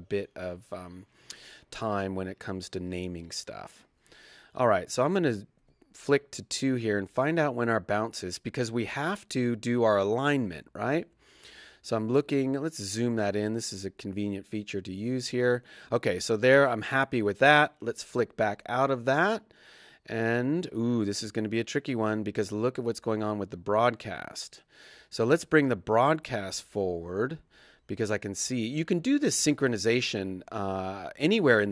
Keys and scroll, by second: 4.3 Right, 5.6 2, 6.1 Right, 9.4 Right, 9.7 Left, 10.6 Right, 17.9 i, 21.6 Right, 23.0 Right, 24.3 Left, 24.9 Right, 26.0 Left, 28.6 Left, 28.6 Right.